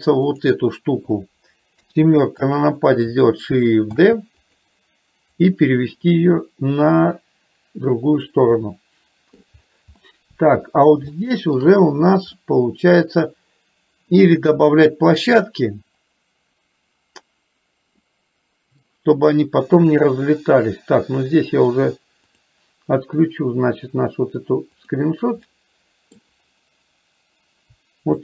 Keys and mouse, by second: 1.8 KP_7, 4.1 shift+d, 5.5-8.5 drag, 8.7 middle click, 10.1 middle click, 11.2 shift+middle click, 12.5 middle click, 18.1 middle click, 24.8 click, 25.6 middle click.